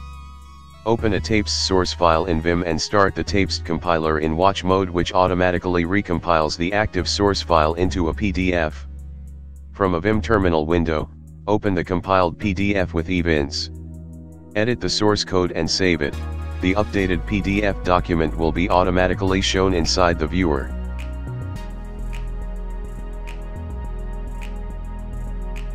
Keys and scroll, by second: 0.0-6.6 typing, 6.7 Tab, 7.5 Return, 9.3 ctrl+w, 10.5 \, 10.8 shift+m, 12.8-14.5 typing, 15.9 e, 16.1 Tab, 17.1-19.2 typing, 20.0 Return, 25.4 ctrl+shift+space.